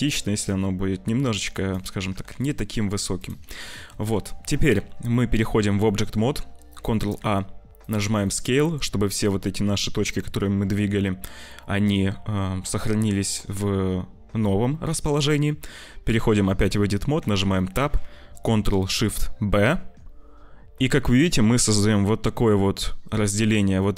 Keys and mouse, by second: 1.4 click, 2.0 g, 3.7 shift+middle click, 4.0 Tab, 5.1 middle click, 5.8 middle click, 6.7 ctrl+a, 8.1 click, 14.2 `, 16.9 Tab, 17.5 shift+click, 19.6 ctrl+shift+b.